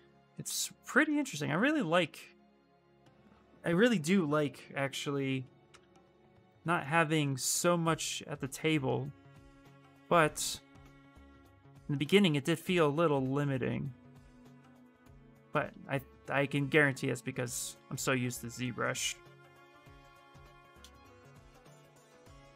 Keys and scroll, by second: 5.4 f.